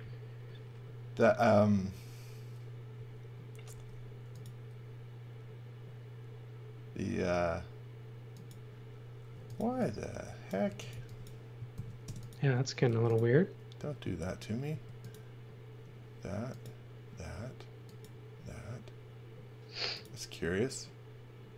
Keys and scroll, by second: 3.7 f, 9.3 x, 9.5 v, 10.6-12.8 typing, 11.7 super+z, 14.0 space.